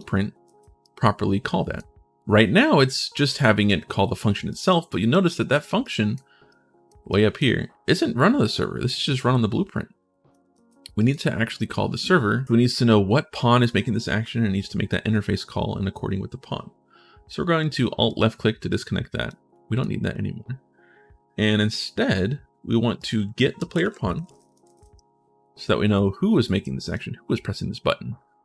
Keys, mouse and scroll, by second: 0.2 ctrl+shift+s, 0.6-1.6 right drag, 2.5 click, 3.2 right click, 4.3 right click, 4.7 right click, 5.1 right click, 5.6 right click, 6.2 right click, 6.9 right click, 10.3 ctrl+shift+s, 10.7 right click, 11.5 right click, 12.7 right click, 17.8 alt+click, 18.5 right click, 19.3 right click, 22.7 right click, 23.4-25.0 typing, 25.7 click, 26.2 click, 28.2 click.